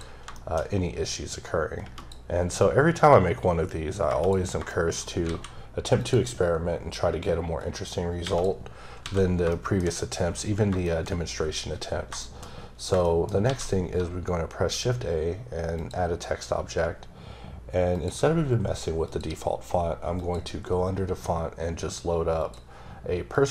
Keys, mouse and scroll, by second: 0.3 middle click, 1.3 click, 3.0 click, 4.7 shift+middle click, 4.9 shift+scroll down 2, 5.2 a, 6.0 click, 7.6 click, 8.9 scroll down 1, 9.0 a, 9.4 scroll down 1, 9.5 shift+middle click, 10.2-10.7 scroll up 2, 10.8 shift+middle click, 12.2 shift+double middle click, 13.0 shift+middle click, 13.4 shift+a, 15.7 click, 16.4-17.4 scroll down 2, 17.9 click, 19.0 click, 20.1 click, 22.4 click.